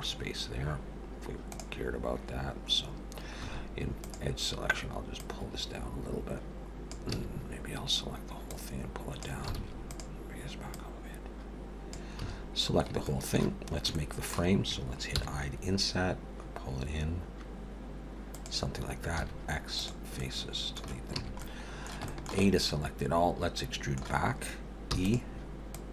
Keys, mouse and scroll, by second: 3.5 2, 4.0 click, 5.2 click, 7.1 a, 8.5 click, 9.5 alt+a, 9.9 click, 10.7 click, 12.2 a, 13.0 shift+middle click, 13.7 scroll up 2, 14.0 shift+middle click, 15.1 i, 19.2 x, 20.2 middle click, 21.1 a, 21.4 middle click, 22.1 shift+middle click, 22.4 middle click, 24.9 e, 25.8 click.